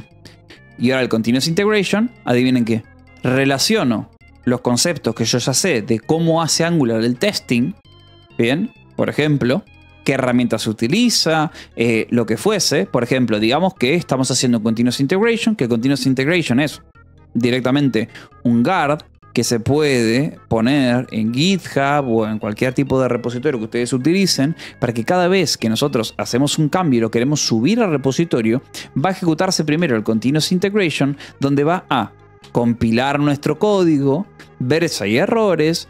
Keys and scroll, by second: 0.0-0.7 typing, 2.0 Return, 13.3 space, 29.3 k, 30.0 k, 30.9 Escape, 31.0 j, 31.5 a.